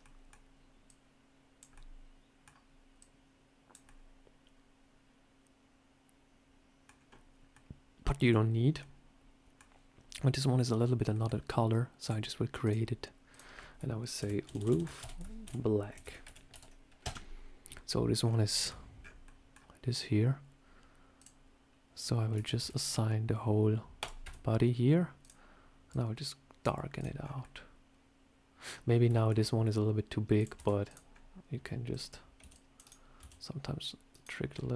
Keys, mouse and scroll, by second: 0.7 click, 1.6 middle click, 2.8 click, 3.7 middle click, 6.8-7.3 scroll up 2, 7.4 middle click, 8.7 middle click, 11.0 middle click, 11.9 click, 12.5 click, 14.0 click, 14.4 o, 21.0 click, 22.2 Tab, 22.5 a, 23.9 click, 24.1 Tab, 25.1 click, 26.8 click, 27.1 scroll down 3, 27.3 middle click, 28.8 scroll up 3, 29.0 shift+middle click, 30.2 click, 30.4 Tab, 30.7 click, 31.0 scroll up 1, 31.8 shift+click, 32.3 c, 33.1 s, 34.4 middle click.